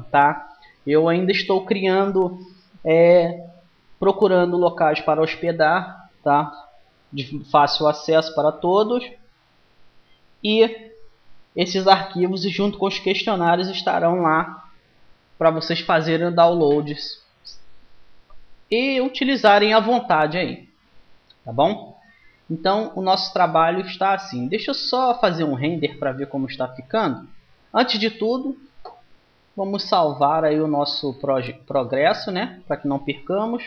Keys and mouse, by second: 19.7-23.8 middle drag, 30.0-31.8 drag.